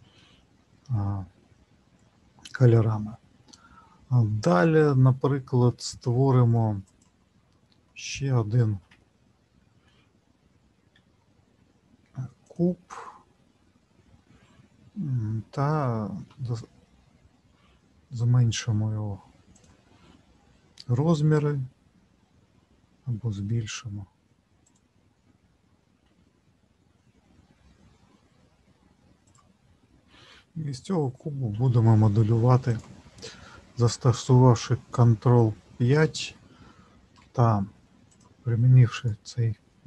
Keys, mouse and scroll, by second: 0.5-1.0 scroll down 1.